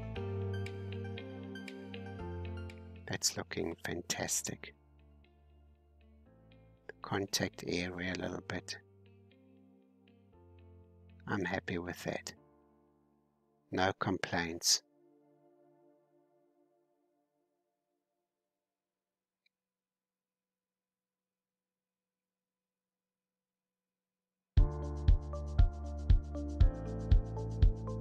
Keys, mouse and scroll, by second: 2.2-2.8 scroll down 3, 2.8-4.4 middle drag, 4.4 scroll down 1, 4.6-5.0 scroll up 4, 5.5 middle click, 6.0 scroll up 1, 6.6-10.7 drag, 10.7 scroll down 1, 11.0-12.2 middle drag, 12.2-12.7 scroll up 2, 12.9-18.8 drag, 18.8-19.1 scroll down 4, 19.4-21.0 middle drag, 21.0 scroll down 2, 21.4-22.8 middle drag, 22.8 scroll up 3, 23.5 shift+middle click, 24.2-24.6 scroll down 1, 25.4 click, 26.2-26.8 scroll down 2, 27.0 alt+h.